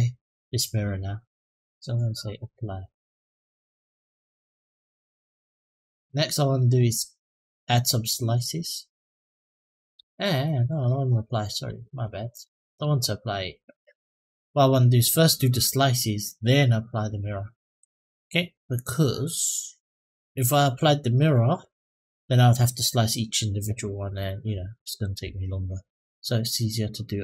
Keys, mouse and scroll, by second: 0.1 click, 3.9-4.7 drag, 5.4 click, 5.8-6.5 middle drag, 8.1 click, 10.0 ctrl+z, 10.4 ctrl+z, 11.3 ctrl+z, 12.1 click, 12.5 click, 17.5 middle click, 25.7 Tab.